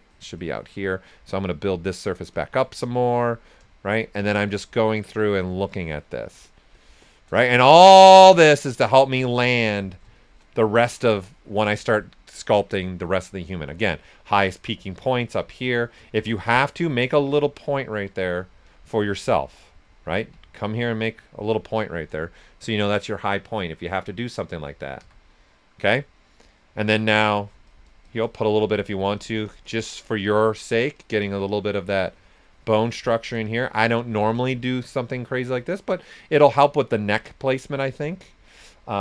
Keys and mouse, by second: 0.7 s, 0.7 click, 3.3 right click, 4.3 shift+click, 5.2 right click, 5.7 shift+click, 7.4 right click, 7.6 s, 7.7 click, 10.0 typing, 10.1 shift+click, 10.7 ctrl+right click, 11.2 shift+click, 11.8 right click, 13.2 right click, 13.6 s, 13.8 click, 15.5 shift+click, 16.1 s, 16.2 click, 16.7 right click, 17.3-18.7 alt+drag, 18.7 right click, 19.2 click, 20.1 ctrl+z, 20.5 click, 21.6-23.3 right drag, 25.0 s, 25.0 click, 25.6 right click, 26.8 alt+click, 30.3 alt+right click, 30.7-33.4 alt+drag, 33.4-35.6 shift+drag, 35.6 right click, 37.1 s, 37.2 click, 38.9 s, 38.9 click.